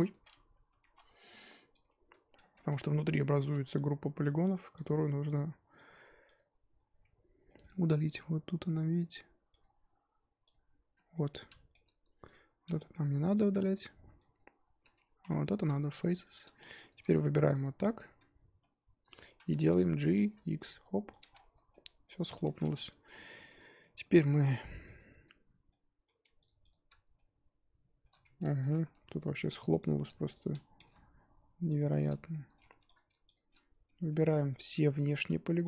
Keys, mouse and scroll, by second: 0.0 ctrl+z, 0.7 Tab, 0.9 2, 1.0-1.8 scroll up 3, 1.8 alt+click, 2.5 z, 2.6-3.4 middle drag, 3.4 3, 4.3 alt+click, 4.8 alt+click, 5.9 alt+click, 7.2 scroll up 1, 7.4 middle click, 7.6-8.1 scroll down 1, 8.1-9.6 scroll up 4, 9.6 alt+click, 10.5 alt+click, 11.1 scroll down 2, 11.3-12.5 middle drag, 12.5 ctrl+click, 12.7 middle click, 13.5 ctrl+click, 14.3 ctrl+click, 15.2 z, 15.3-16.0 middle drag, 16.0 x, 16.2-16.9 shift+middle drag, 16.9 2, 17.6 alt+click, 18.1 z, 18.6-19.3 middle drag, 19.3 z, 20.1 g, 21.3 scroll down 2, 21.4 Tab, 21.7-22.4 middle drag, 22.4 Tab, 22.6 3, 22.9-24.7 middle drag, 24.7 click, 24.8 middle click, 25.5 scroll up 1, 25.7 middle click, 26.4 shift+click, 26.7 shift+click, 27.1-28.9 middle drag, 28.9 1, 29.1 scroll up 1, 29.2-29.8 scroll down 1, 29.8 click, 29.9-30.7 scroll up 1, 30.8 g, 32.0-32.7 middle drag, 32.7 3, 32.9 click, 33.3 shift+click, 33.5-35.6 shift+middle drag.